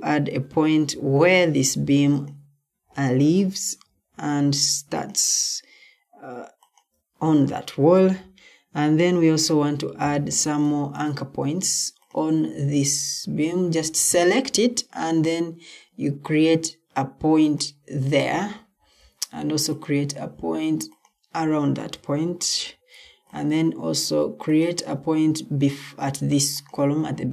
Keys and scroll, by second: 10.0 Escape, 22.2 Escape.